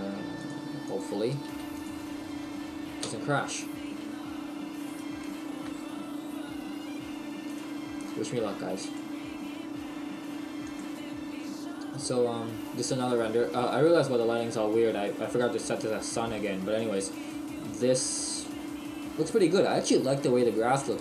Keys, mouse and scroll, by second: 3.0 KP_Decimal, 3.8-4.4 scroll down 6, 4.8 right click, 5.7 KP_Decimal.